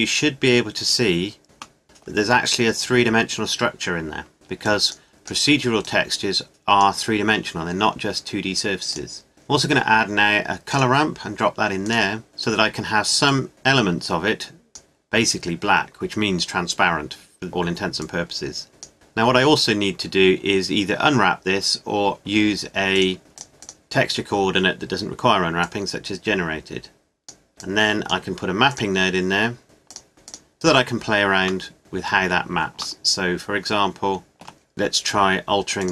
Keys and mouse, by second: 2.5 middle click, 3.5-10.5 drag, 13.4-14.6 middle drag, 15.9-18.8 middle drag, 21.0-22.9 middle drag, 30.5-35.8 middle drag, 35.8-35.9 drag.